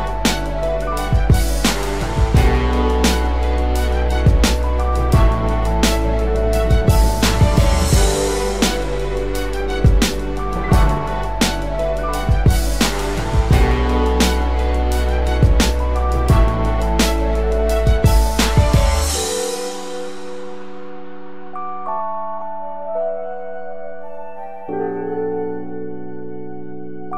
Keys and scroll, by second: 0.9 v.